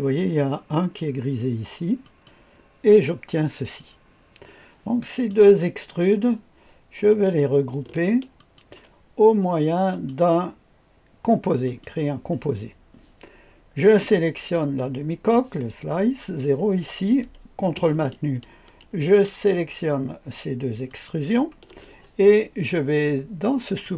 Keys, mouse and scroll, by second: 2.0 click, 3.3-5.4 drag, 7.1 click, 8.4 ctrl+click, 9.9 click, 11.6 click, 13.8 click, 20.9 ctrl+click, 23.8 click.